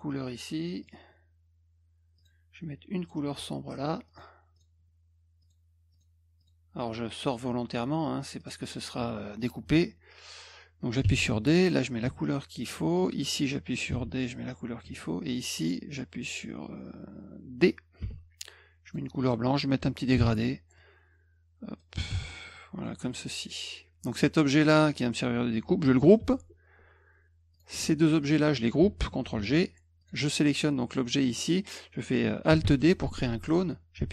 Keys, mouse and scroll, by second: 0.8 click, 2.2 click, 3.0 click, 4.1 click, 4.6 click, 5.4 click, 5.9 click, 6.4 click, 6.9 click, 7.2 click, 8.4 click, 11.1 d, 11.6 click, 12.1 F2, 13.0 click, 13.9 d, 14.1 click, 14.5 F1, 15.3 click, 18.1 d, 18.9 click, 20.2 g, 20.8-21.8 drag, 22.2 d, 22.8 click, 23.1 F1, 27.5 click, 28.2 shift+click, 29.3 ctrl+g, 30.0 click, 32.6 alt+d.